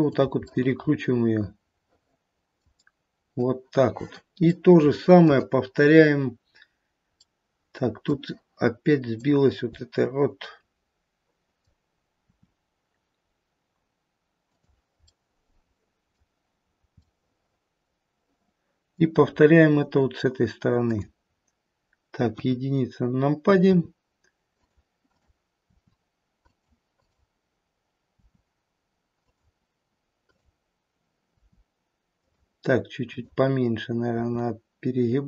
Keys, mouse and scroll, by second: 0.4 middle click, 1.4 middle click, 2.1 middle click, 4.3 middle click, 4.4 shift+middle click, 5.2 shift+middle click, 6.3-7.2 scroll up 1, 7.2 middle click, 9.1 click, 10.0 middle click, 10.6 middle click, 12.2 middle click, 12.2 r, 15.2 middle click, 16.0 middle click, 16.6-17.2 scroll down 2, 16.9 middle click, 17.2 middle click, 18.1 middle click, 19.1-19.7 scroll up 2, 20.8 click, 20.8-21.5 scroll up 1, 22.2 KP_1, 23.6 r, 25.0 click, 25.8 r, 27.0 click, 28.2 r, 30.3 click, 31.2 r, 33.0 click, 34.2 r.